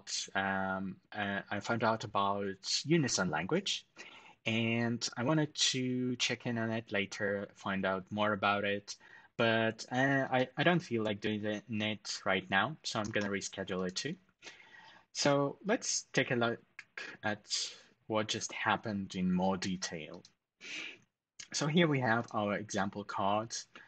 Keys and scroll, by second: 12.8 ctrl+alt+shift+super+#.